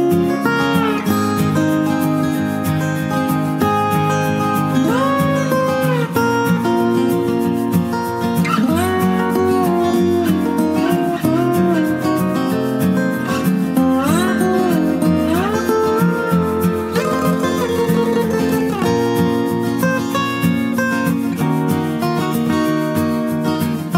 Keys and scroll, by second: 1.9 ctrl+t.